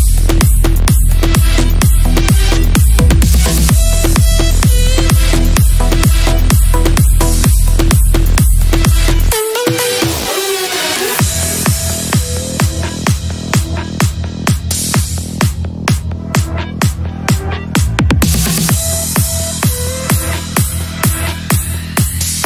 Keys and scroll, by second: 1.6 shift+F2, 6.1 F3, 7.1 ctrl+r, 18.0 l, 18.8 shift+F2, 19.5 Up, 21.2 F3, 21.7 Escape.